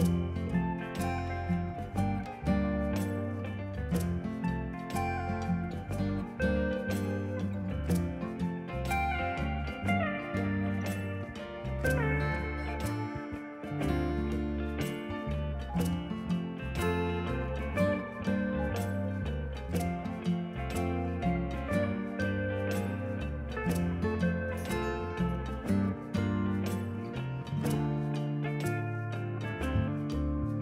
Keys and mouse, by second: 2.1 ctrl+1, 2.6 click, 2.7 right click, 2.9 click, 20.6 ctrl+x, 20.7 Escape, 20.9 click, 21.7 Escape, 22.8 click, 23.7 KP_3, 23.8 Return, 24.2 click, 25.1 ctrl+1, 25.2 click, 29.5 ctrl+s.